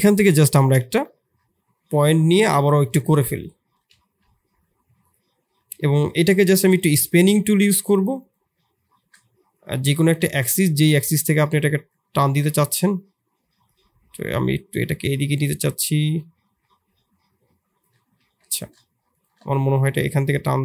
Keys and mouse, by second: 0.0 click, 0.2 click, 1.2 KP_3, 2.8 ctrl+KP_1, 3.7 e, 6.7-18.2 drag, 18.2 ctrl+z.